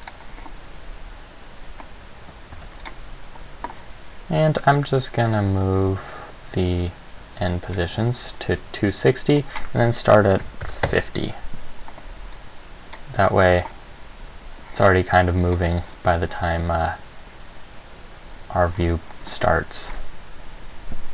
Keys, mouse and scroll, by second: 0.2 click, 2.7 ctrl+s, 5.2 click, 9.5 click, 12.6 click, 15.4 click.